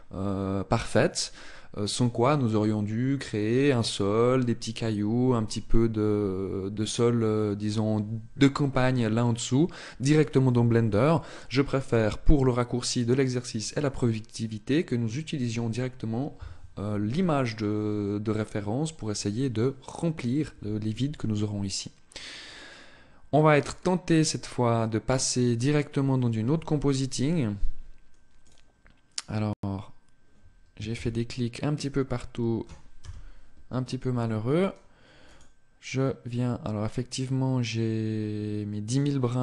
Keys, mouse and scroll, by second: 26.5 Escape, 28.4 click, 30.5 shift+c, 32.7 KP_0, 35.3 click, 38.6 click.